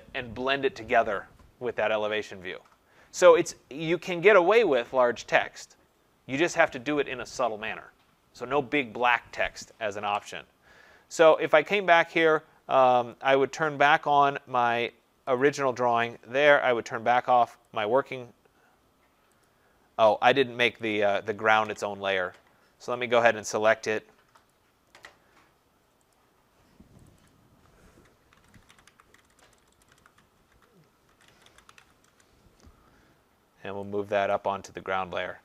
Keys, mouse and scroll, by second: 3.6 click, 11.5 click, 15.4 click, 17.6 click, 19.5 click, 20.9 click, 23.0 click, 23.7 click, 24.5 click, 26.2 click, 27.1 click, 27.3 click, 28.2-32.6 typing, 30.7 Caps_Lock, 34.3 click.